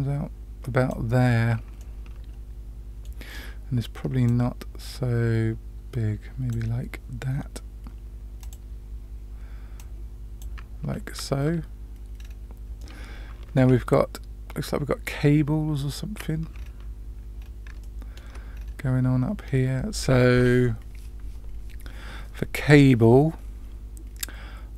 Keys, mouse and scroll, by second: 1.7-3.1 middle drag, 4.2-6.5 drag, 8.4 click, 9.7-10.4 drag, 12.1-12.5 scroll down 2, 12.7-13.5 middle drag, 16.5-17.3 scroll up 1, 17.3 scroll up 1, 17.8-18.2 shift+middle drag, 18.5-20.3 scroll up 2.